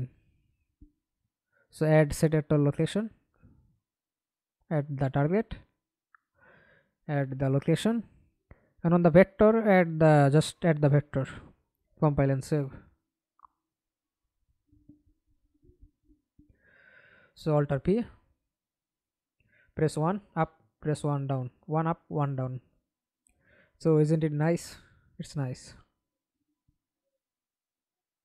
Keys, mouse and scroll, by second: 6.7 scroll up 1, 12.1 double click, 13.3 middle click, 14.3 F11, 15.5 alt+p, 17.0-18.2 typing, 19.3-23.9 typing, 26.0-28.2 typing.